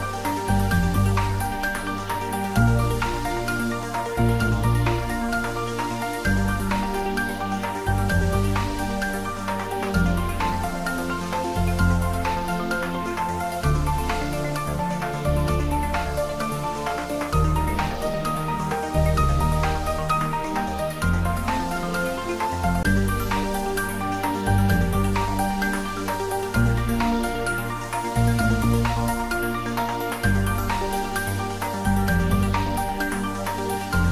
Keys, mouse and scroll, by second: 1.5-2.2 scroll up 1, 2.6 middle click, 3.6 shift+click, 5.2 click, 5.8 scroll down 1, 7.3 shift+d, 7.6 r, 11.7 click, 12.5 3, 12.6 KP_3, 13.8 r, 16.0 click, 16.6 g, 21.5 click, 22.6 KP_3, 22.9 3, 23.7 scroll up 1, 24.6-25.8 scroll down 1, 25.8 s, 26.1 x, 29.2 click, 29.4-30.9 typing, 32.1 BackSpace, 32.7 click, 33.3-34.1 middle drag.